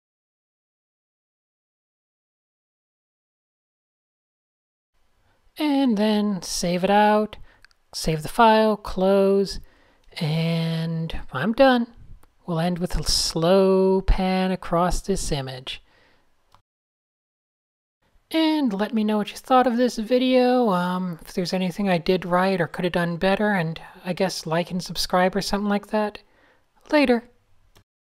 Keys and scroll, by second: 3.1 alt+shift+super+s, 6.7-7.6 typing, 15.4 super+s, 15.5 super+w.